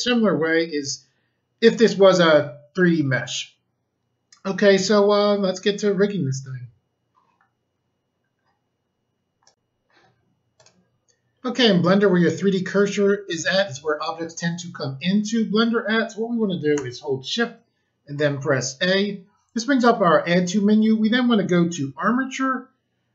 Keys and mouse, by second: 9.4 click, 10.5 click, 18.1 a.